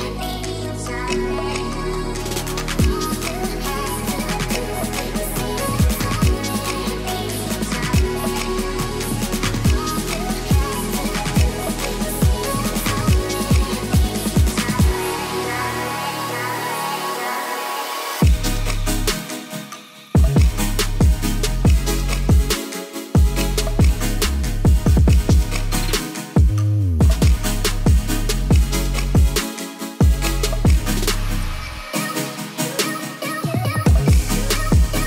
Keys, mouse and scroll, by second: 0.0 ctrl+s, 0.2-1.2 middle drag, 2.4 middle drag, 2.9 shift+a, 4.5 shift+click, 5.1 s, 5.2 z, 6.6 s, 7.3 drag, 7.7 shift+middle click, 8.0 middle click, 8.5 g, 8.6 y, 9.0 click, 9.1 middle drag, 9.6 middle click, 10.6 shift+middle click, 11.0 middle drag, 11.3 click, 11.7-12.0 middle drag, 12.2 r, 12.7 x, 13.2 drag, 13.5-13.8 middle drag, 14.0 click, 14.3 s, 14.6 x, 16.6-17.0 drag, 17.8-18.3 drag, 18.5 ctrl+s, 18.7 click, 18.9 middle click, 19.3-20.7 typing, 19.8-20.2 drag, 22.0-22.3 middle drag, 22.7 s, 24.1 r, 24.3 x, 25.7 middle drag, 26.0 r, 26.1 x, 26.6 click, 26.7 Tab, 26.9 middle click, 27.3 middle click, 27.6 ctrl+s, 27.7 middle drag, 27.8 click, 27.9 click, 28.5 click, 28.7-29.7 middle drag, 29.9 middle click, 30.4 KP_1, 31.0 shift+drag, 32.2 click, 32.8 click, 33.2 s, 33.9 click, 34.0 Tab, 34.5 click.